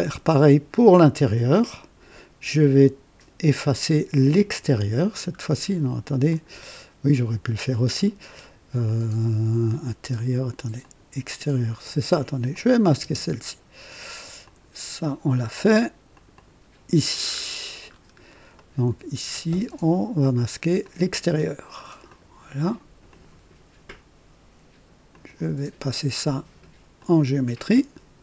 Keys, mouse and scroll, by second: 4.2 click, 6.2 click, 8.7 click, 10.7 click, 12.4 click, 13.0 space, 14.3 click, 16.0 click, 17.2-18.1 scroll up 4, 18.5 right click, 20.7 click, 22.0 click, 23.0 click, 25.0 click, 26.9 click.